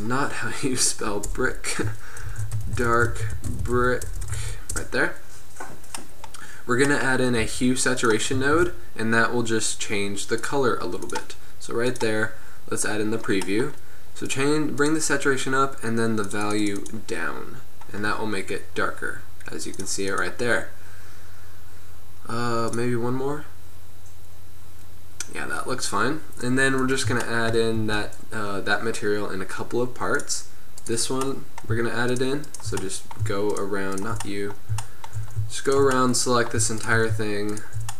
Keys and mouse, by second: 0.0-1.7 drag, 1.5 BackSpace, 4.2 BackSpace, 7.5 g, 8.6 shift+a, 11.2-13.6 drag, 13.6-14.0 middle drag, 14.5-16.7 middle drag, 16.7-18.7 drag, 25.9-26.4 middle drag, 28.1 Tab, 31.4-32.8 middle drag, 35.2-37.9 middle drag.